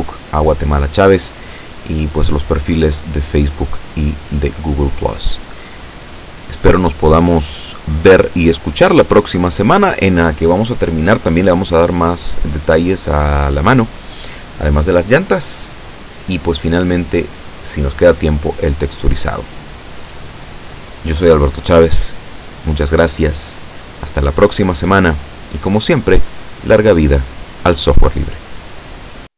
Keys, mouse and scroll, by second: 12.7 right click.